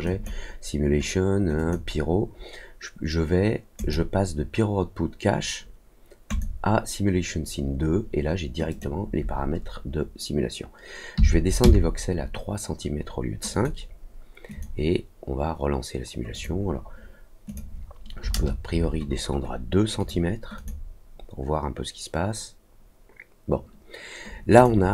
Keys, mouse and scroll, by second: 0.0 click, 1.5 click, 3.7 click, 6.2 click, 8.6 click, 13.5 click, 14.4 click, 16.3 click, 17.4 click, 19.9 click, 20.5 click, 24.5 click.